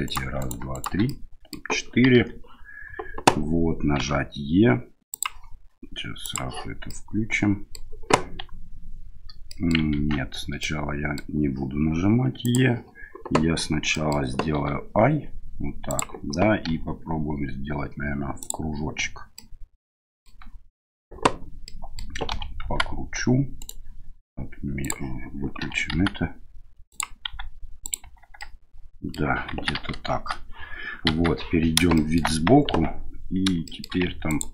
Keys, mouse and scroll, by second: 0.0 shift+right click, 0.4 right click, 0.7 right click, 1.0 middle click, 2.1 KP_1, 4.0 e, 6.2 click, 6.9 middle click, 9.5 middle click, 9.9 ctrl+z, 10.6 middle click, 12.4 click, 13.9 middle click, 14.6 i, 16.7 w, 19.4 middle click, 21.7 middle click, 22.3 r, 24.9 click, 25.6 r, 27.3 s, 28.0 Tab, 28.4 middle click, 29.5 KP_1, 30.0 KP_Enter, 31.0 KP_3, 31.9 shift+middle drag, 32.7 Tab, 33.6 shift+middle click, 34.3 ctrl+click.